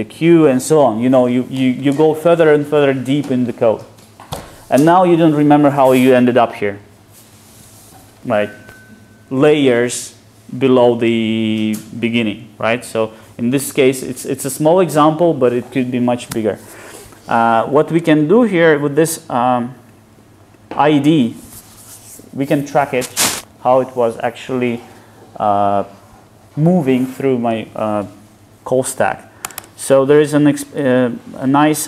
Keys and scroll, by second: 6.8 super+b.